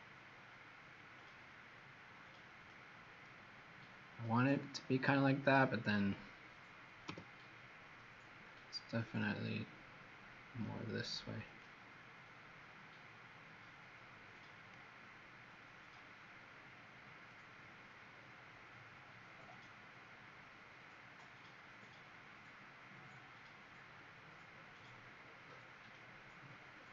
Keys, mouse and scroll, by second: 7.0 h, 7.8 middle click, 11.5 click, 15.1 middle click.